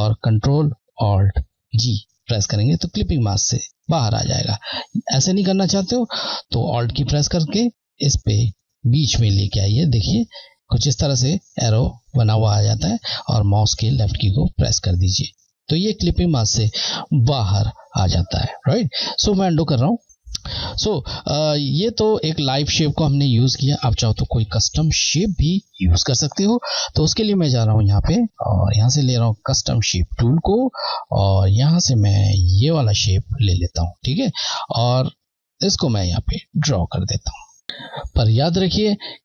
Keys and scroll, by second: 1.9 ctrl+g, 4.3 z, 14.2 Left, 19.5 ctrl+z, 21.5 Left, 24.4 Delete, 27.7 Left, 35.5 Left.